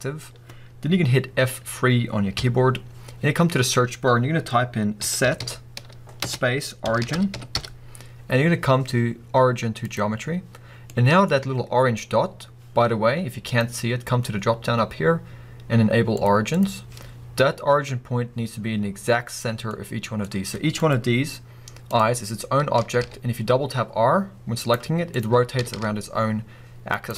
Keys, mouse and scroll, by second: 2.4 F3, 10.8-13.4 middle drag, 11.3-13.4 scroll up 2, 13.4-19.7 drag, 19.7 scroll up 1, 19.7-20.7 middle drag, 20.7 click, 21.9 click, 22.3 scroll down 1, 22.8 r, 24.7 right click, 25.1 click, 25.5 r, 27.0 right click.